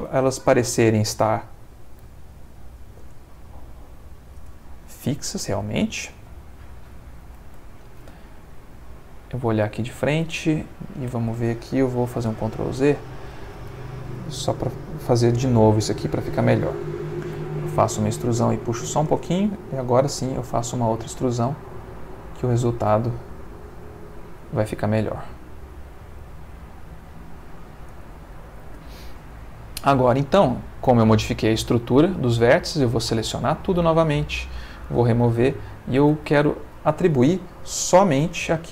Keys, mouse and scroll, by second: 0.3 shift+middle click, 2.0 e, 2.9 y, 4.4 space, 4.9 middle click, 5.7 shift+middle click, 8.8 click, 9.8-11.0 ctrl+middle drag, 11.1 ctrl+shift+middle click, 12.2 ctrl+z, 17.3 e, 19.1 space, 20.1 e, 24.4 y, 27.9 space, 30.9 click, 32.2 a, 34.5 click, 38.2 z.